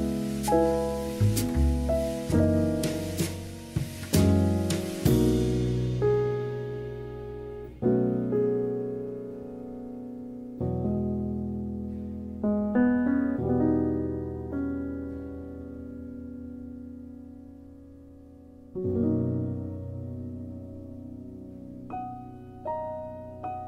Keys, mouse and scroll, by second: 0.2 click, 7.7 s, 7.9 x, 8.4 click, 10.0-11.7 middle drag, 12.5 click, 12.9 alt+shift+click, 13.5 KP_7, 14.3 shift+middle click, 15.4 g, 17.9 r, 18.5 click, 19.1 KP_1, 21.2-22.3 middle drag, 22.3-23.3 scroll down 1, 23.3 KP_1.